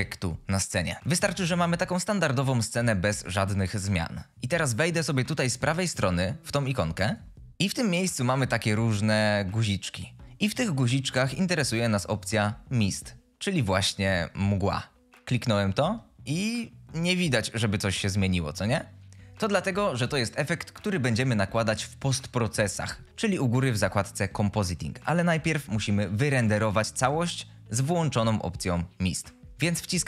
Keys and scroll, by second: 7.4 F22, 16.5 F22.